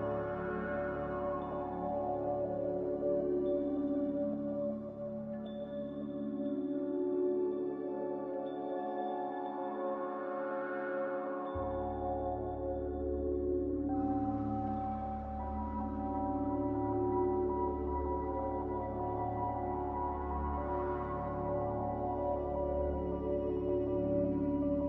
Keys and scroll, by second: 0.2 Escape, 2.4 ctrl+c, 2.4 a, 3.9 g, 4.5 g, 6.9-7.3 typing, 7.0 Return, 10.4 a, 14.5 Delete, 15.2 m, 18.0 q, 18.7 m, 19.5 Delete.